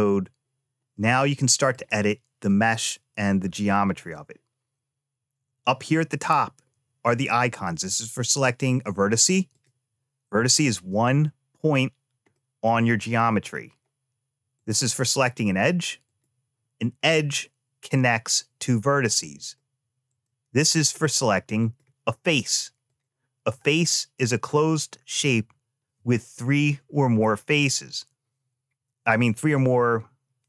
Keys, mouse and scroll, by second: 0.7 middle click, 3.8 click, 9.3 click, 12.1 middle click, 12.6-13.2 scroll up 2, 13.2-14.3 scroll down 2, 14.3 click, 15.8 click, 19.2 click, 19.9 click, 21.4 click, 22.6 click.